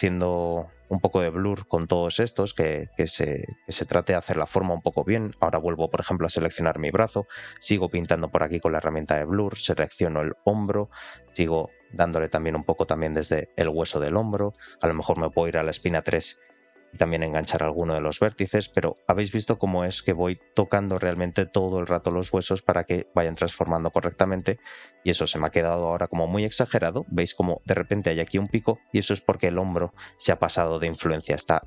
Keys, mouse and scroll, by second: 0.0 scroll down 2, 0.2 middle click, 0.7 click, 1.0 click, 2.1 click, 2.4 click, 2.6 click, 3.4 middle click, 4.3 click, 4.5 click, 4.8 middle click, 6.3 ctrl+click, 7.2 click, 7.4 click, 7.6 click, 7.9 click, 8.3 middle click, 8.8 click, 9.0 click, 9.3 middle click, 10.3-12.0 ctrl+click, 11.0 click, 11.3 click, 11.5 click, 11.7 click, 11.9 click, 12.2 middle click, 12.8 click, 13.0 click, 13.7 click, 13.9 click, 14.3 middle click, 15.0 ctrl+click, 15.6 shift+middle click, 16.2 click, 16.5 click, 16.8 click, 17.0 click, 17.8 middle click, 18.5 shift+middle click, 19.2 ctrl+click, 20.4 click, 20.9 shift+middle click, 21.6 scroll up 1, 21.9 shift+middle click, 26.1 ctrl+click, 30.4 r.